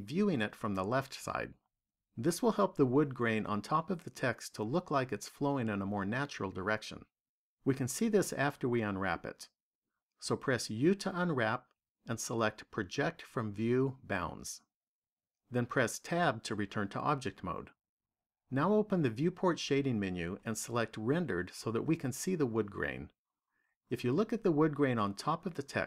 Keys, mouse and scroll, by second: 10.5 u, 15.8 Tab, 19.9 click.